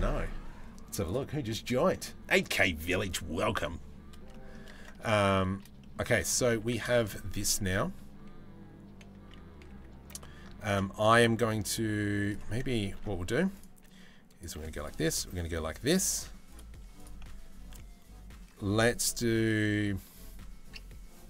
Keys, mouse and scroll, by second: 3.9 middle click, 4.8 middle click, 5.4 middle click, 6.2 Tab, 6.5 shift+middle click, 9.3 a, 10.3 ctrl+r, 12.6 ctrl+r, 14.3 ctrl+r, 15.8 3, 16.1 click, 16.6 alt+click.